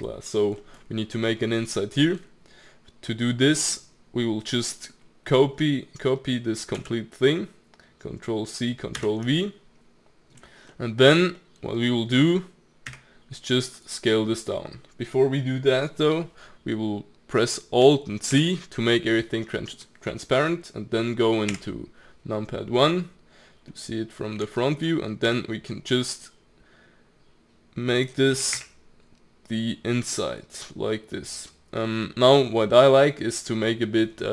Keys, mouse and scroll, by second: 0.6-1.6 middle drag, 1.6 scroll up 3, 1.8 middle click, 2.5-4.7 scroll down 2, 4.7-6.8 middle drag, 6.8 ctrl+c, 9.0 ctrl+v, 10.7-12.9 middle drag, 12.9 s, 18.3 alt+z, 19.4-21.5 middle drag, 21.5 KP_1, 22.3-23.2 scroll up 1, 23.2-24.6 scroll up 1, 24.6-25.3 shift+middle drag, 25.3 s, 28.3 g.